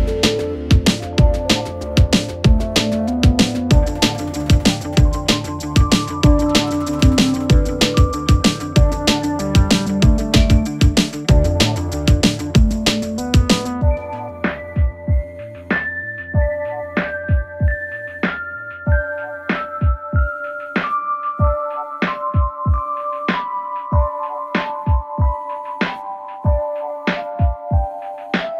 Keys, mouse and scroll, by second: 6.9-19.2 drag, 19.2 right click, 21.7-28.5 drag.